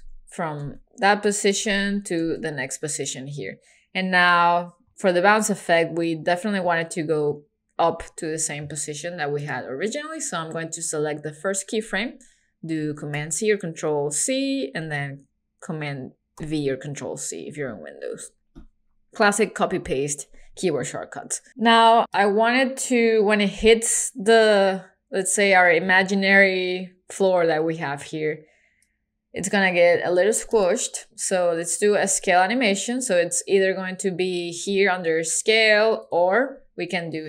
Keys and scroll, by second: 13.2 super+c, 16.4 super+v.